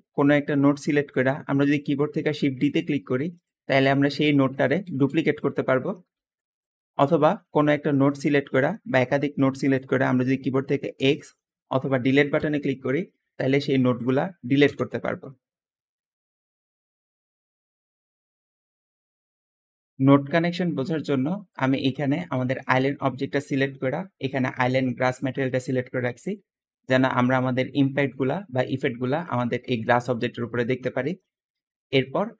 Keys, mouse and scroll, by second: 0.7 middle click, 0.7-1.4 scroll down 2, 2.2 shift+d, 2.3 shift+d, 3.6 middle click, 4.7 shift+d, 5.0 shift+d, 6.0 shift+d, 10.8 x, 12.2 Delete, 14.5 x, 14.5 x, 19.4 middle click, 19.4 scroll down 2, 19.5-20.9 scroll up 4, 20.4 middle click, 20.9 scroll down 2, 22.0 g, 22.1 g, 27.0 `, 30.5 Escape, 30.6 Escape, 30.9 middle click, 31.3 middle click, 31.3-32.0 scroll up 1.